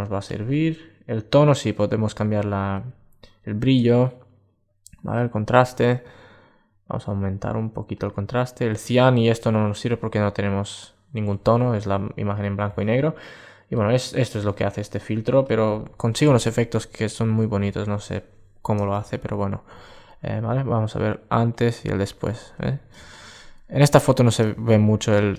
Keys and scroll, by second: 22.8 super+space.